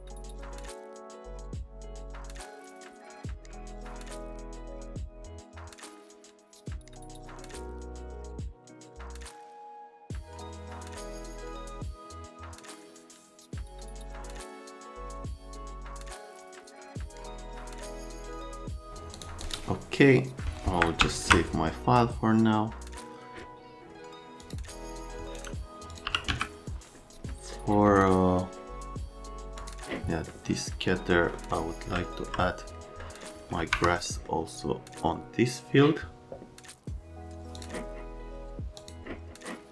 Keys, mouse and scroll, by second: 0.0 click, 0.1 right click, 0.3 shift+click, 0.7 click, 0.8 middle click, 0.8 right click, 1.0 click, 1.1 click, 1.6 click, 1.8 click, 2.1 alt+middle click, 2.3 F3, 2.3 middle click, 3.9 click, 4.1 click, 4.2 middle click, 4.5 click, 4.7 click, 4.8 click, 5.1 click, 5.2 middle click, 5.3 click, 5.5 click, 5.8 z, 5.9 click, 6.1 middle click, 6.2 alt+middle click, 6.3 middle click, 6.4 click, 6.6 click, 7.1 click, 7.3 click, 7.5 click, 7.8 middle click, 7.9 right click, 8.1 middle click, 8.2 middle click, 8.5 right click, 8.6 middle click, 8.8 click, 8.9 click, 9.0 middle click, 9.2 click, 9.8 click, 9.9 right click, 10.0 click, 10.2 click, 10.6 click, 10.7 right click, 11.1 click, 11.2 right click, 11.4 click, 11.7 middle click, 11.9 alt+right click, 12.3 right click, 12.5 right click, 12.6 right click, 12.8 middle click, 12.9 right click, 13.1 scroll, 13.3 alt+middle click, 13.4 middle click, 13.7 shift+right click, 14.0 middle click, 14.3 middle click, 14.6 shift+middle click, 15.1 right click, 17.9 middle click, 18.0 right click, 18.2 middle click, 18.7 c, 19.1 click, 19.4 click, 21.0 s, 24.4 click, 25.3 right click, 25.8-26.8 typing, 25.9 click, 27.5 middle click, 29.5 middle click, 31.1 right click, 31.9 alt+right click, 33.0 right click, 33.7 F3, 34.0 right click, 37.6 click, 38.8 click.